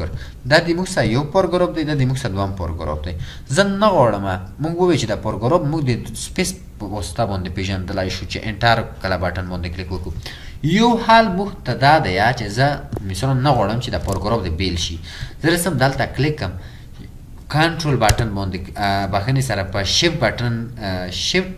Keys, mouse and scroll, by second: 0.7 typing, 14.4 typing, 18.1 ctrl+Return, 19.2-19.5 scroll up 1, 20.2 scroll down 1.